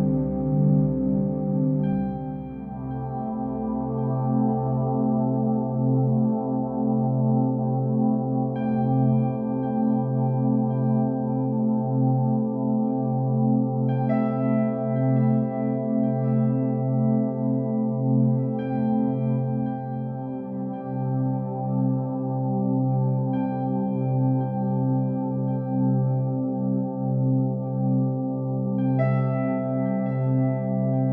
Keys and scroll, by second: 0.8 ctrl+g.